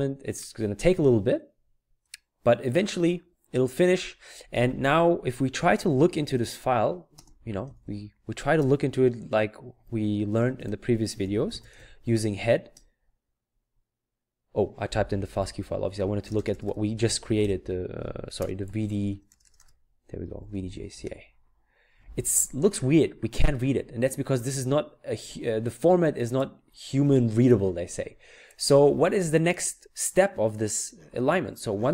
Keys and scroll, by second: 5.8-6.2 typing, 7.6-8.6 typing, 9.7-12.6 typing, 15.4 Up, 20.1-21.1 typing.